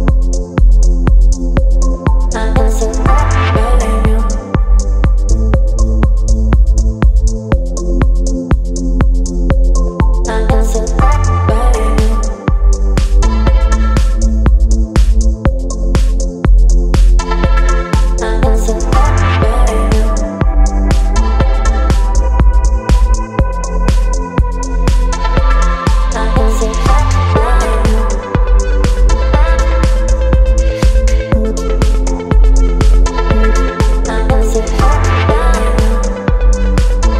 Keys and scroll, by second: 23.1 space.